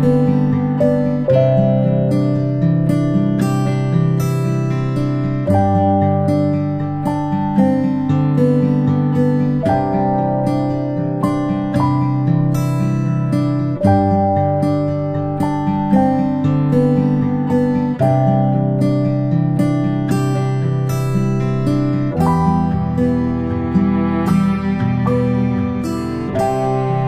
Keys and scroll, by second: 1.4 ctrl+shift+z, 3.9 ctrl+z, 21.0 ctrl+space, 21.7 p, 26.7 space, 26.9 space.